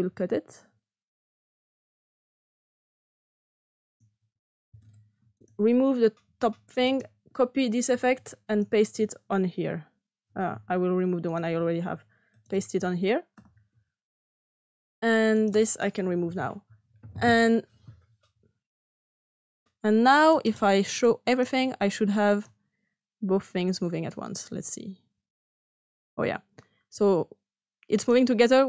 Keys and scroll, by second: 0.0 x, 4.5 s, 6.3 Delete, 7.8 ctrl+c, 13.3 ctrl+p, 16.1 Delete.